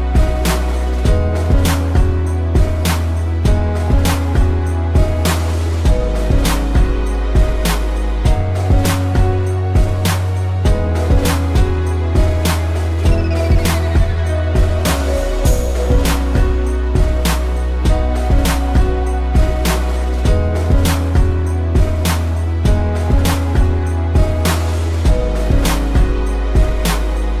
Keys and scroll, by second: 7.4 ctrl+=, 7.7 space, 12.5 ctrl+z, 14.0 ctrl+z, 18.3 space, 20.6 ctrl+=, 20.8 space, 21.7 space, 22.7 ctrl+-, 23.1 space.